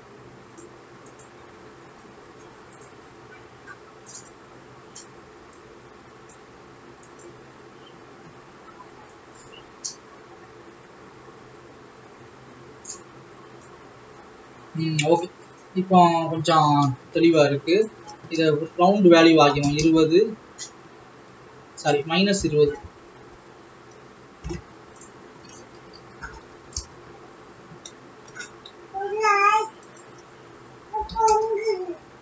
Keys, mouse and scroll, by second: 2.3 click, 3.2 scroll down 1, 4.7 click, 8.5-9.7 scroll up 3, 9.7-14.5 drag, 20.0-27.6 drag, 29.7-30.2 scroll up 2, 30.2-32.2 drag.